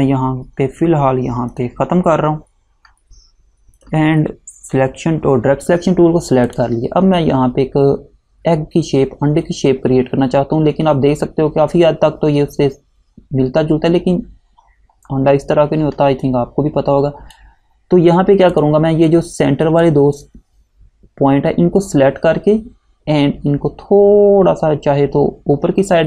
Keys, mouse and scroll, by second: 1.6 click, 6.6 click, 14.8-15.4 scroll down 1, 16.3 click.